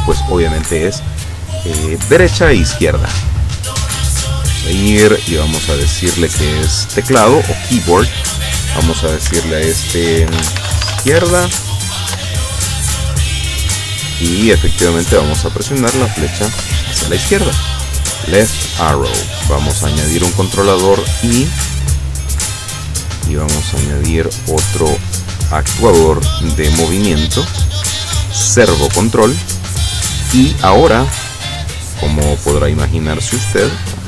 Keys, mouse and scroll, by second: 4.4 click, 7.1 click, 8.4 click, 10.3-11.2 typing, 12.2 Return, 13.9 click, 16.7 Left, 19.9 click, 20.8 click, 21.7 click, 23.6 click, 24.7 click, 25.9 click, 27.8-28.9 drag, 31.3 scroll down 2, 31.9-32.3 scroll up 1, 33.9 click.